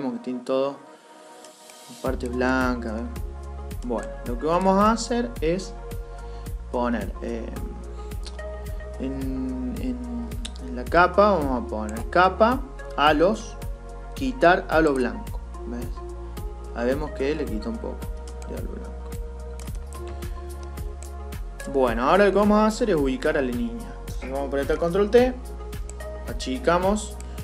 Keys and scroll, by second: 24.5 ctrl+t.